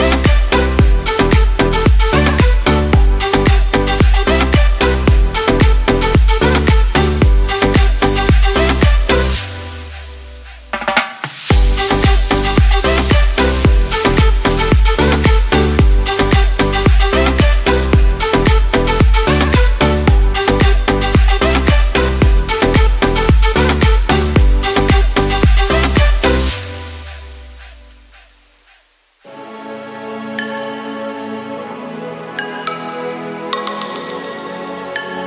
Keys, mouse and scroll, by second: 20.8 right click, 21.3 right click, 23.7 x, 29.9 x.